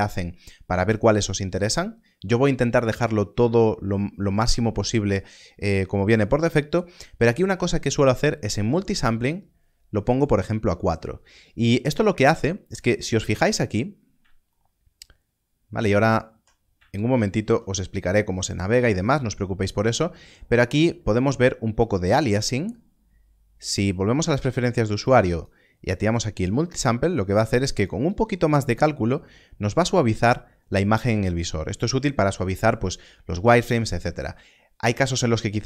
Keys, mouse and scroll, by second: 9.1 click, 13.3-13.9 scroll up 1, 13.9 scroll down 1, 14.0 scroll up 1, 14.5 shift+middle click, 16.9 shift+middle click, 18.5 shift+middle click, 23.7 shift+middle click, 23.9 click.